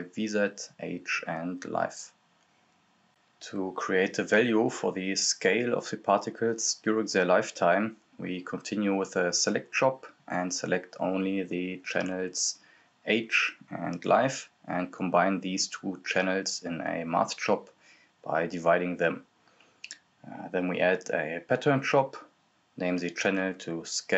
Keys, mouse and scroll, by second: 0.2 right click, 1.0-2.5 typing, 3.5 click, 5.8-10.3 drag, 10.1-11.7 typing, 11.8-12.4 scroll up 1, 12.5 right click, 12.9-14.0 typing, 14.5 click, 17.1 click, 18.7-19.9 typing, 20.8 click, 23.7 click.